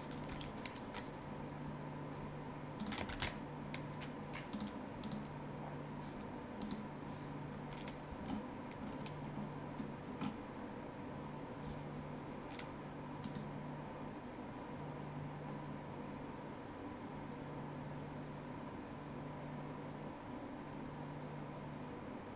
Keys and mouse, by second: 2.8 click, 3.1 ctrl+s, 4.5 click, 6.6 click, 13.2 click.